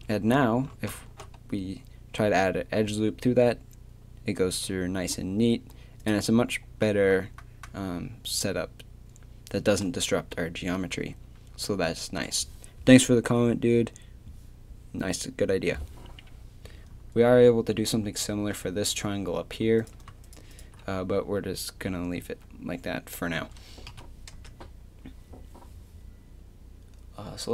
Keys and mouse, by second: 1.1 ctrl+r, 6.1-19.8 drag, 19.8-22.2 right drag, 22.2 a, 23.9 KP_3, 24.3 Tab.